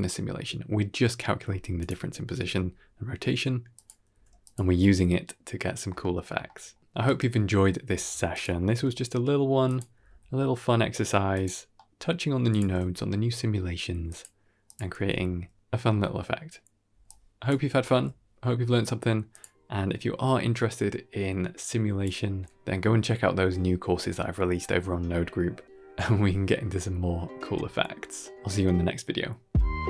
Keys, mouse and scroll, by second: 1.7 click, 2.1 r, 3.9 middle click, 5.0 g, 7.9 s, 8.5 g, 9.8 r, 11.7 middle click, 12.4 click, 12.6 g, 14.5 click, 14.9 g, 16.9 click, 17.7 g, 20.5-20.9 drag.